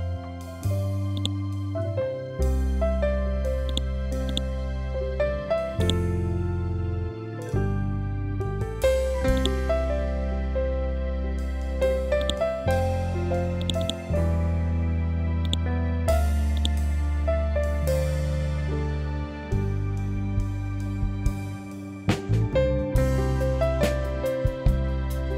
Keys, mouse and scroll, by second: 1.1 right click, 3.6-12.1 drag, 18.1 typing, 18.8 Tab, 20.4-20.7 typing, 21.3 shift+Tab.